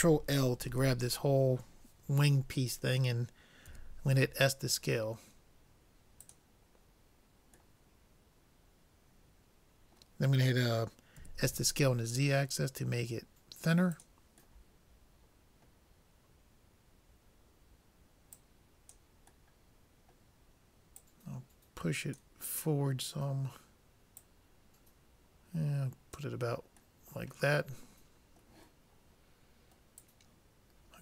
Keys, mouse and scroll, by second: 0.7 ctrl+l, 3.7 s, 7.1-9.8 middle drag, 11.2 s, 14.7-16.7 middle drag, 18.3-20.3 drag, 19.5-21.4 middle drag, 21.0-22.8 drag, 24.2-25.9 drag, 27.1-28.9 middle drag.